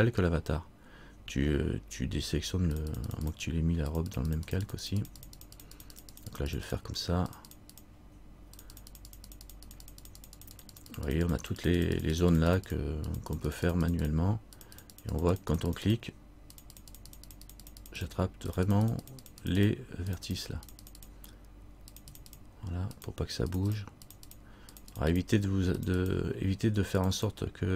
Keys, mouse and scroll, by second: 2.9-27.7 click.